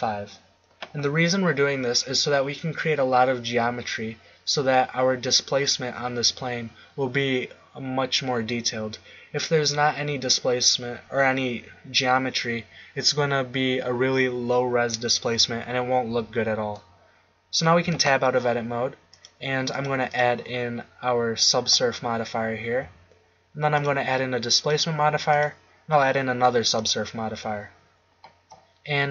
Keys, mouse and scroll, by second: 17.8 Tab, 19.1-22.3 drag, 23.7-27.3 drag.